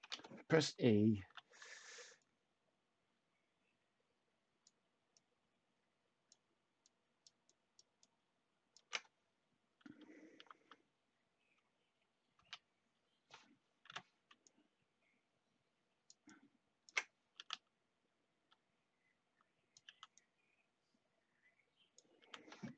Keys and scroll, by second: 0.0 e, 1.2 h, 10.3 t, 12.3 e, 13.8 h, 17.3 t, 19.8 t, 22.1 t.